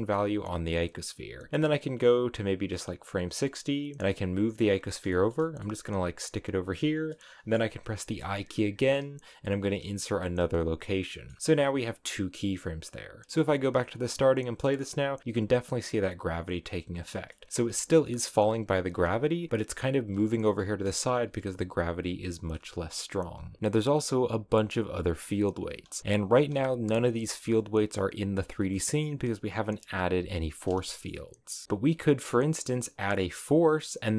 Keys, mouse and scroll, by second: 1.3-3.3 drag, 3.3-3.9 scroll down 2, 3.9 g, 4.8 shift+middle click, 5.7 g, 6.9 scroll up 1, 7.1 middle click, 7.9 i, 11.0 middle click, 11.4 scroll up 6, 12.5 click, 13.4-16.2 middle drag, 16.2 click, 16.6-17.0 scroll up 2, 17.0 shift+middle click, 17.5 space, 18.1 middle click, 18.3 space, 18.9 space, 22.3 middle click, 22.7 right click, 23.6 space, 25.8 space, 26.3 space, 28.6-31.6 middle drag, 31.6 space, 32.9-34.1 drag.